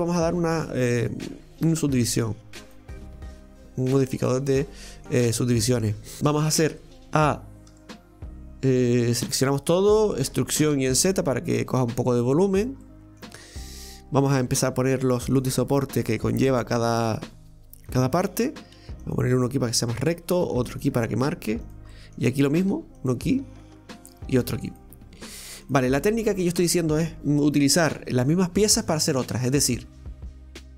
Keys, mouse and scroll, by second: 0.0-3.1 drag, 4.3-6.8 middle drag, 6.8 Tab, 12.8-14.4 middle drag, 14.4 ctrl+r, 18.2 middle click, 18.8 ctrl+r, 21.9 middle click, 22.7 ctrl+r, 26.0-29.0 middle drag, 29.3-30.7 middle drag.